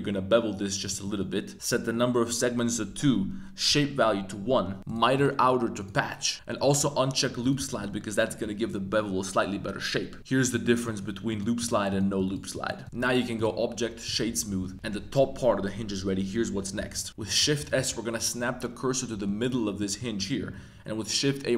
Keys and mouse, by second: 0.8 click, 1.0 click, 4.8 click, 5.1-5.8 drag, 10.4 click, 10.8 click, 11.3 click, 11.9 click, 12.5 click, 12.8 click, 12.8 Tab, 13.5-14.1 drag, 14.5 middle click, 14.7 a, 17.2 shift+s, 19.2-19.5 drag, 19.7-20.0 drag, 20.4 shift+a.